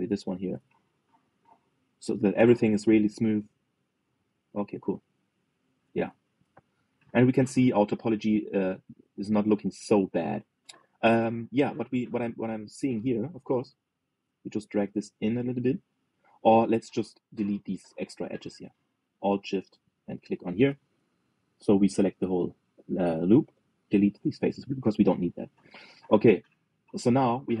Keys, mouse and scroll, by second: 0.1 click, 0.9 g, 3.6 click, 4.2-5.6 shift+middle drag, 5.6 scroll down 1, 5.8 middle click, 6.4 scroll down 3, 7.1 alt+z, 7.4-7.7 scroll down 1, 7.7-13.0 middle drag, 13.0 click, 14.5 alt+shift+click, 18.1 click, 20.2 alt+shift+click, 24.3 Delete, 25.3-27.6 middle drag.